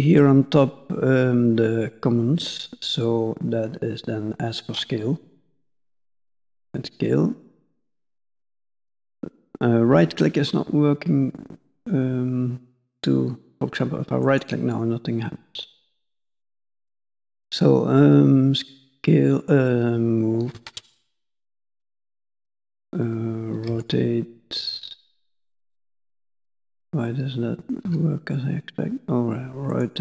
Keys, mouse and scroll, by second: 27.0 middle click.